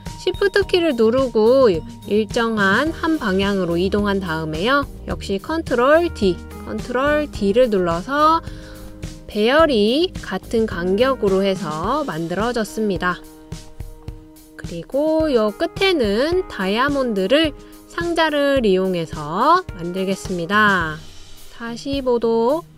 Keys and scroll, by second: 6.3 super+d, 7.5 super+d.